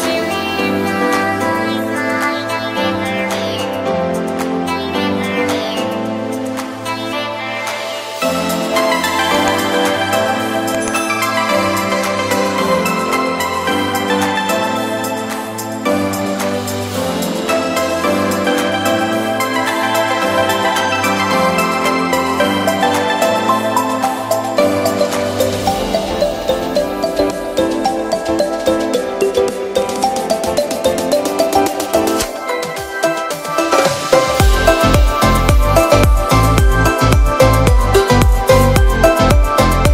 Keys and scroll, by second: 1.4 ], 3.5 z, 5.7 n, 6.4 b, 6.9 ], 11.0 ], 12.2 ], 20.3 z, 21.2 v, 29.8 z, 30.9 v, 34.2 z, 35.2 v, 35.9 super+v, 37.7 super+].